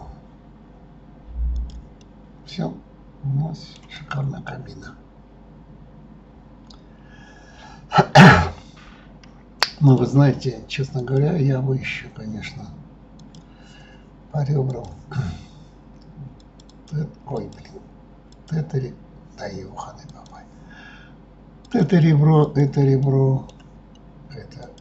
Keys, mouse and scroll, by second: 2.0-3.9 middle drag, 3.9 click, 4.4-7.5 middle drag, 11.0 click, 13.2 click, 14.7 click, 16.4 click, 16.7 click, 17.3 click, 18.3 click, 20.1 click, 21.6 click, 22.4 shift+click, 23.0-24.6 middle drag, 24.6 shift+click.